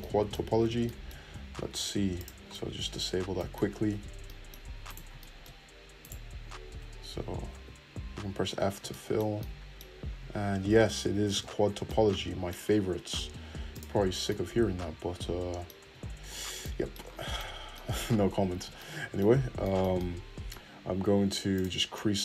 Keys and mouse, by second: 2.1 click, 2.2-4.9 middle drag, 3.9 2, 4.9 click, 5.0 shift+middle click, 6.6 1, 7.5 f, 8.5 f, 11.3 f, 11.6 Tab, 13.7-21.8 drag, 15.8 Tab, 21.8-22.2 middle drag.